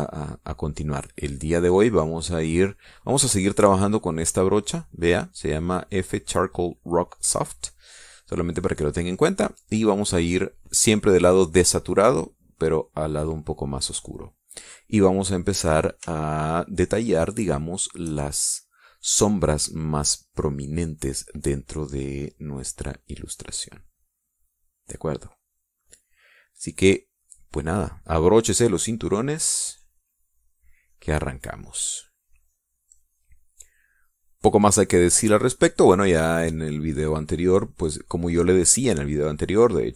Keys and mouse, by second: 10.6-13.0 drag, 13.3-14.4 drag, 14.8 middle click, 15.4 click, 15.6 middle click, 15.9 click, 16.0 middle click, 16.7-18.6 shift+drag, 22.7-26.8 drag, 28.0-33.8 drag, 35.2-37.8 drag, 38.0 middle click.